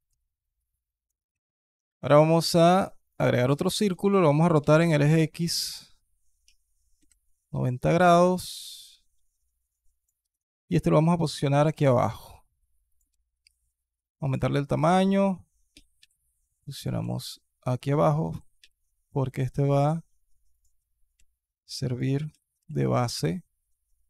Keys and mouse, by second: 0.7 alt+drag, 1.1 shift+a, 3.3-3.6 alt+drag, 4.4 r, 8.3-9.9 alt+middle drag, 10.0 alt+KP_1, 11.4 g, 12.9 s, 14.6 alt+click, 15.5 g, 16.8 s, 18.1 g, 21.0 s, 22.1 g.